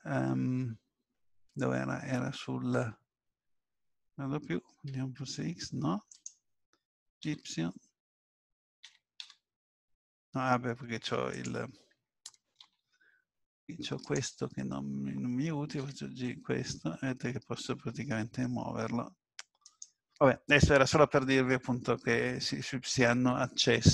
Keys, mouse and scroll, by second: 7.2 y, 8.9 g, 12.6 ctrl+z, 14.0 click, 15.8 g.